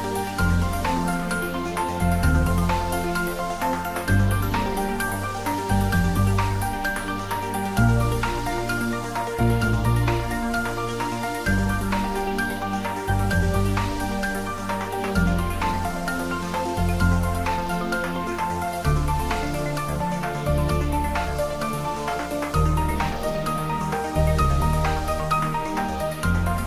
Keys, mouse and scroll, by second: 4.3 click, 7.1 click, 11.9 scroll down 1, 12.4-14.0 middle drag, 14.0-15.0 scroll up 1, 15.3-16.6 scroll down 1, 18.5-20.8 scroll up 1, 20.8-22.5 middle drag, 22.5-23.1 scroll up 1, 24.5-25.9 scroll down 1.